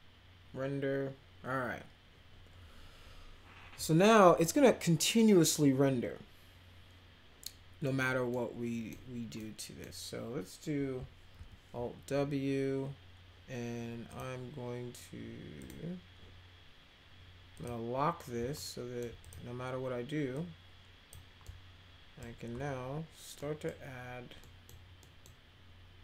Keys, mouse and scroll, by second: 8.3 middle click, 9.4 middle click, 11.3 alt+w, 14.0 click, 15.5 click, 17.5 click, 18.5 alt+middle click, 19.2 click, 20.3-21.1 drag, 21.4-22.2 alt+middle drag, 23.3 middle click, 24.4 middle click, 25.0 middle click.